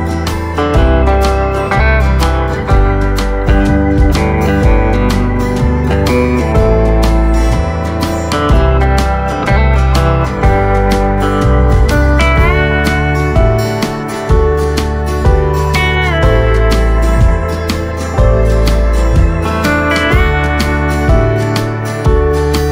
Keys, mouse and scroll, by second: 2.6 s, 6.4 s, 10.6 shift+d, 19.4 ctrl+z, 21.5 r.